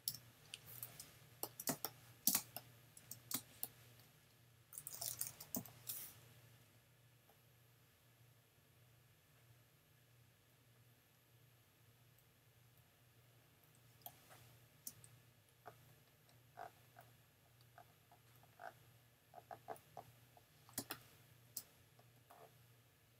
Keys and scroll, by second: 0.1 shift+super+[, 1.7 shift+super+space, 2.3 space, 5.6 n, 13.8 space, 20.8 space.